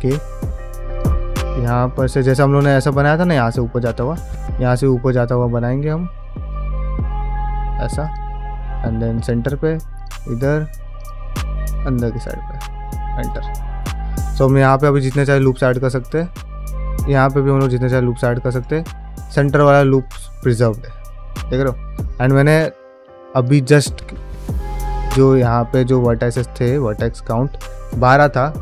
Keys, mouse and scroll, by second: 13.5 middle click, 14.2 ctrl+r, 16.4 middle click, 17.2 ctrl+r, 19.0 3, 19.4 alt+click, 19.8-20.6 scroll down 2, 20.1 middle click, 21.1-21.8 scroll up 2, 21.5 middle click, 22.4 2, 22.7 1, 23.2 alt+click, 25.7 middle click.